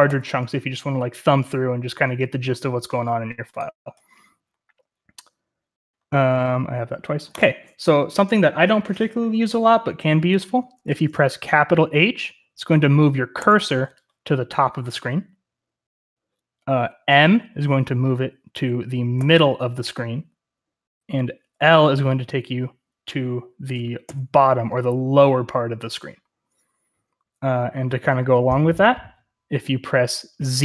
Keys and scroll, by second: 13.3 shift+h, 19.1 shift+m, 24.0 shift+l.